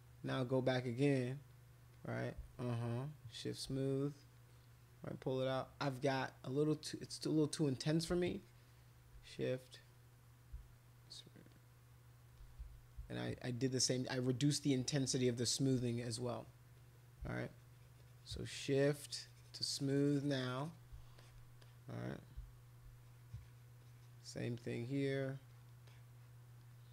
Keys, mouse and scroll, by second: 0.2 click, 0.7 click, 1.0 click, 1.3 click, 1.9 click, 2.1 click, 2.5 shift+click, 3.8 click, 4.2 click, 4.5 click, 4.7 click, 5.0 click, 6.7 click, 7.0 click, 8.2 shift+click, 9.4 click, 11.5 shift+click, 16.3 click, 16.8 click, 16.9 click, 17.4-20.7 shift+drag, 21.2 alt+click, 21.6 click, 23.0 click, 23.2 click, 23.5 click, 23.8 click, 24.6 click, 25.5 click, 25.9 click.